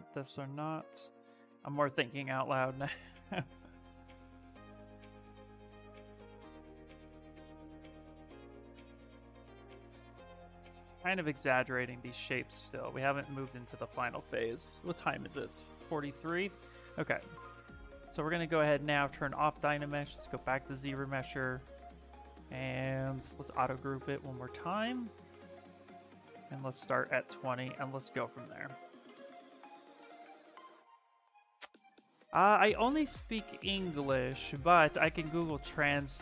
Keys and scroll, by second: 23.0 2.